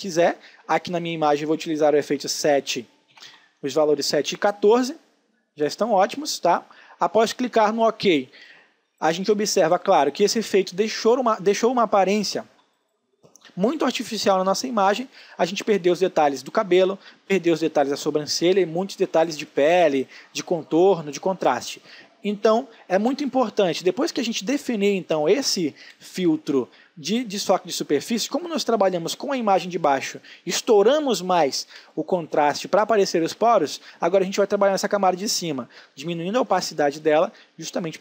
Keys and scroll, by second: 1.3 7, 2.1 Tab, 2.8-3.8 typing, 7.8 space, 17.2 space, 22.7 space, 31.3 ctrl+space.